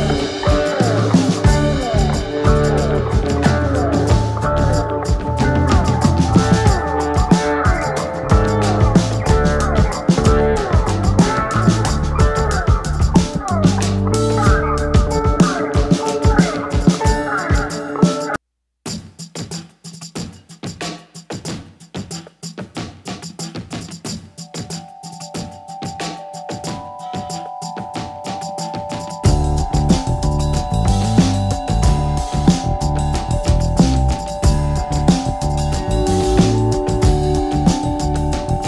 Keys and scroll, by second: 11.2 ctrl+z.